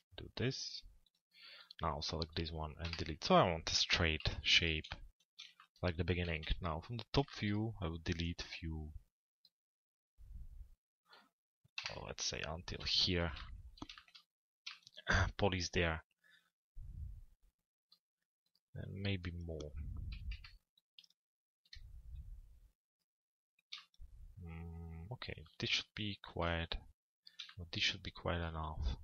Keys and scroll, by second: 2.4 Delete, 4.2 p, 6.0-6.9 typing, 11.5 Delete, 12.8 p, 20.0 Delete.